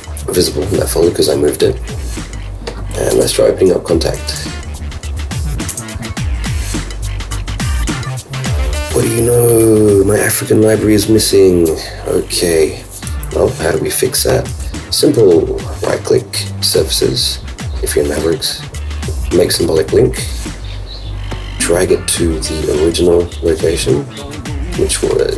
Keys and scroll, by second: 3.1 super+space, 14.8 super+q.